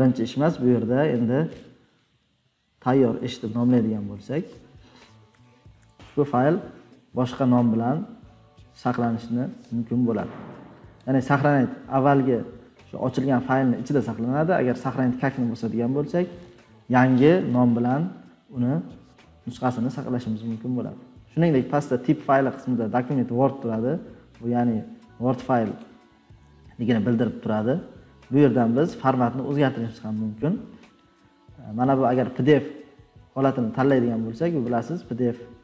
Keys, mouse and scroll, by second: 2.7-4.5 typing, 28.7 click.